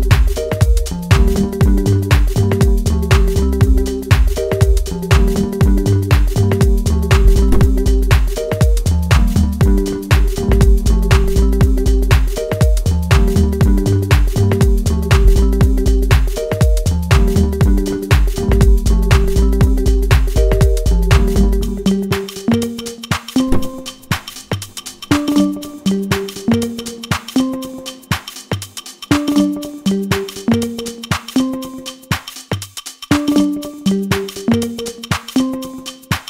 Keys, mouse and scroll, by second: 0.5 click, 3.2 click, 15.3 click, 16.6-20.5 middle drag, 20.5 click, 21.6-23.1 middle drag, 23.1 click, 24.9-27.5 middle drag, 27.5 click, 27.9 middle click, 28.7 click, 29.7-32.5 middle drag, 32.8-36.0 drag, 36.0-36.2 middle drag.